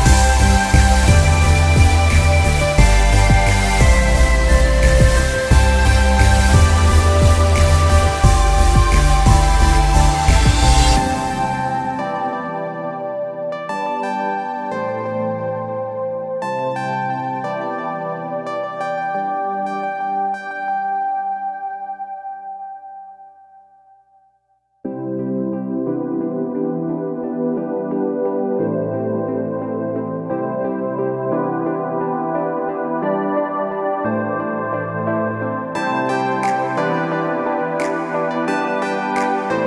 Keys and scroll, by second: 1.8 ctrl+j, 2.0 ctrl+t, 2.7 ctrl+Return, 3.4 e, 6.0 ctrl+e, 7.1 space, 11.2 ctrl+a, 11.3 ctrl+c, 11.4 ctrl+w, 13.1 ctrl+v, 13.6 ctrl+t, 16.0 alt+shift+space, 17.2 ctrl+alt+shift+Return, 17.7 ctrl+t, 19.4 ctrl+shift+Return, 20.2 space, 20.7 ctrl+space, 20.8 ctrl+t, 21.6 ctrl+Return, 33.4 ctrl+t, 34.4 ctrl+Return, 37.9 b.